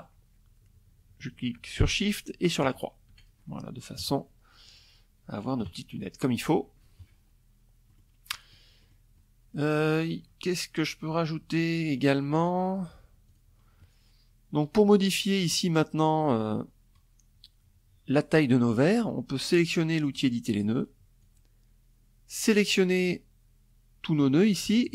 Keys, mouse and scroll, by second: 1.2 shift+click, 1.7 shift+click, 2.5 KP_Subtract, 4.1 KP_Subtract, 6.4 click, 6.8 click, 7.3 click, 7.7 click, 10.9 click, 11.8 click, 18.7 click, 19.7-22.9 drag.